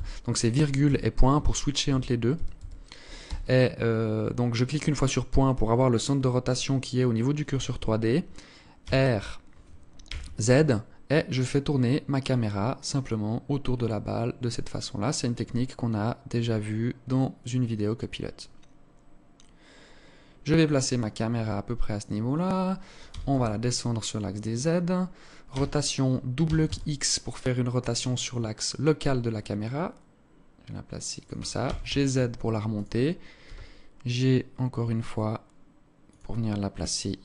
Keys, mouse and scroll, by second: 0.0-1.5 typing, 2.9 ., 8.4 r, 20.9-21.5 scroll up 1, 21.5-22.7 scroll up 1, 22.7 g, 25.1 r, 31.2 g, 33.0 g.